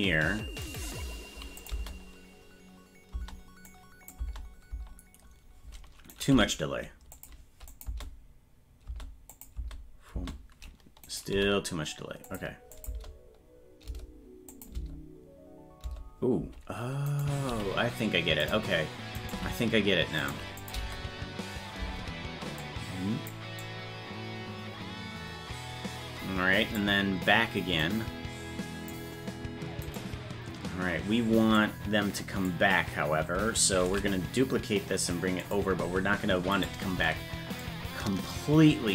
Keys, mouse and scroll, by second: 1.6 click, 1.7 space, 3.6 click, 4.1 space, 6.1 right click, 6.3 g, 7.7 click, 7.8 space, 9.3 click, 9.5 space, 11.0 right click, 11.3 g, 12.7-13.9 drag, 12.8 space, 14.5 click, 14.7 space, 17.0 right click, 17.4 g, 19.1 right click, 19.3 g, 20.6 click, 22.6 click, 23.6-26.7 drag, 27.8-28.8 drag, 29.8 right click, 31.5 click, 33.8 shift+d, 36.6 right click, 37.5-38.9 shift+drag.